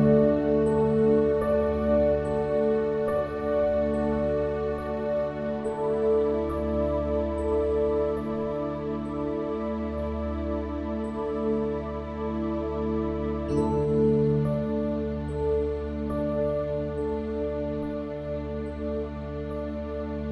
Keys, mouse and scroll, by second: 5.1 alt+KP_7, 6.4 ctrl+KP_7, 11.7-15.1 middle drag, 15.1-16.9 drag, 17.8-19.7 drag.